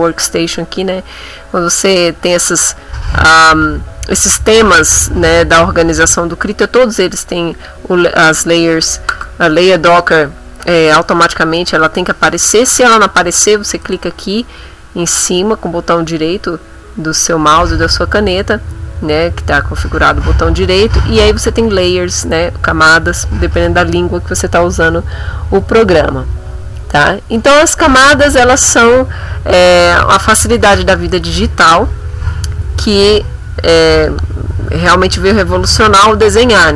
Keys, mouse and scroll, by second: 7.5 click, 13.9 right click, 28.0 click.